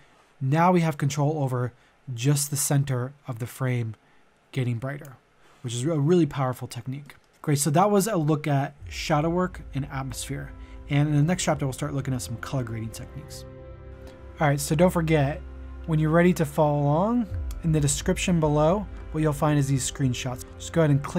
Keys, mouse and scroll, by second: 5.3 click, 7.0 middle click, 13.2 middle click.